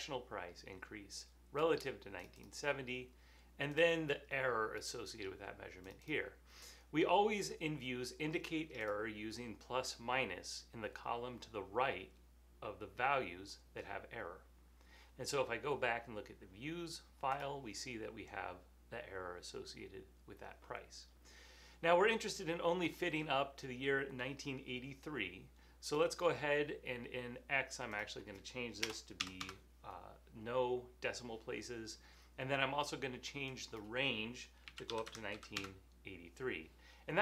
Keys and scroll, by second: 28.9 BackSpace, 29.2 0, 29.4 Home, 32.2-32.5 typing, 34.5-35.8 typing.